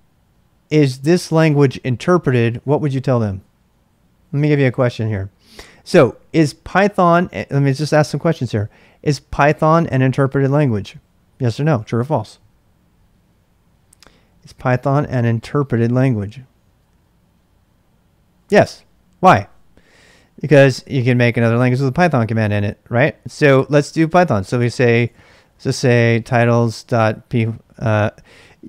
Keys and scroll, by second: 20.8-21.9 typing, 23.2-27.6 typing.